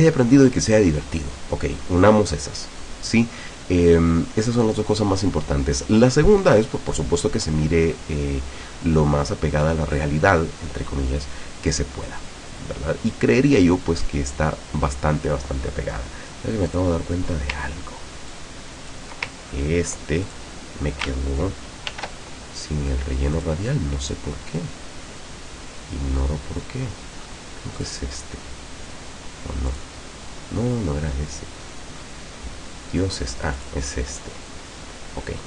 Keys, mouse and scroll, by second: 16.7 click, 18.4 ctrl+click, 19.5-19.9 ctrl+scroll up 2, 20.3 ctrl+click, 21.9 ctrl+shift+f, 23.4 click, 24.1 click, 26.7-27.1 scroll down 2, 27.8 click, 29.7 click, 31.7 scroll down 2, 33.0 scroll down 2, 33.6 click, 34.1 scroll up 2.